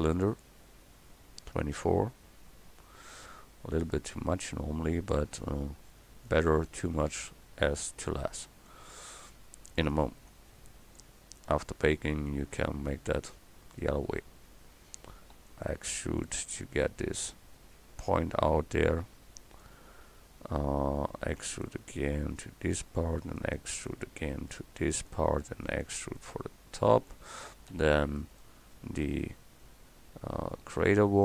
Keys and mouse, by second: 0.8 s, 7.7 Tab, 8.9 click, 10.9-15.4 drag, 15.4 e, 16.2-18.6 drag, 21.3 e, 22.9-25.7 drag, 23.2 e, 25.4 e, 27.1-28.2 drag, 27.7 e, 28.7-31.0 drag.